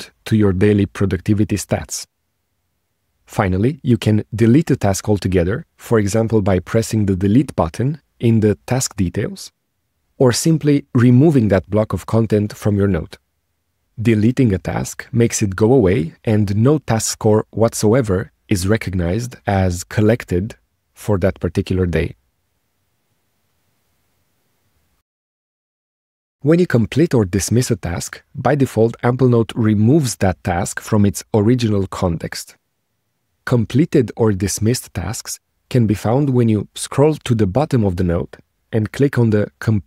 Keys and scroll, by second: 10.4 BackSpace.